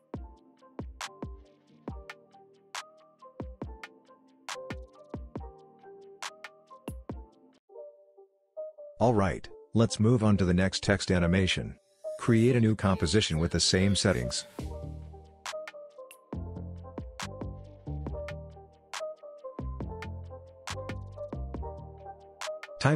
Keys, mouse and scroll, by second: 1.2 space, 1.6 click, 3.8 ctrl+z, 4.2-5.8 drag, 11.6 click, 15.3-17.7 typing, 19.1 Return, 21.6 click, 22.8-22.9 typing.